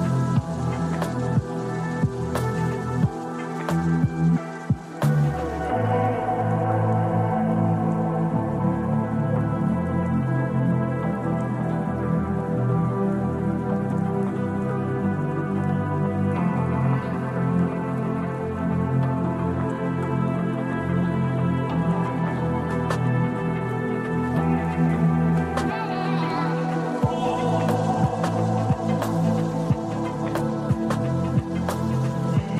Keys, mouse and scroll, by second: 1.6 Delete, 4.7-5.8 drag, 7.1 KP_1, 10.2-12.7 drag, 18.4 click, 19.7 click, 20.0 click, 23.7 click.